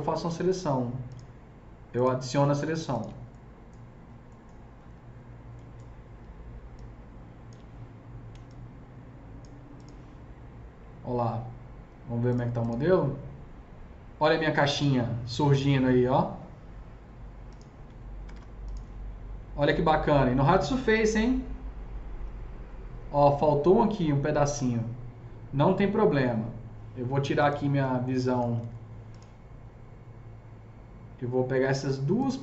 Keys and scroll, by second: 8.2 s, 17.9 F3, 18.1 F3, 18.2 F4, 27.8 F3, 28.2 F4, 28.6 F3.